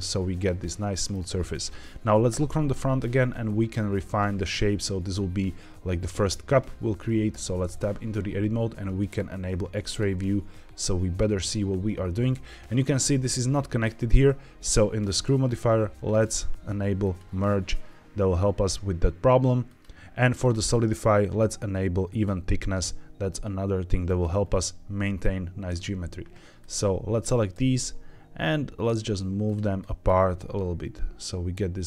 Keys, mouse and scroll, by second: 2.2 KP_1, 3.0 scroll up 1, 3.4 shift+middle drag, 7.2 Tab, 9.8 click, 12.2-12.8 scroll up 3, 15.0 click, 16.9 click, 19.6 click, 20.3 click, 22.0 click, 24.0 click, 25.6-26.2 scroll down 3, 26.5 click, 27.4 g, 29.4 click, 29.7 click, 30.1 g.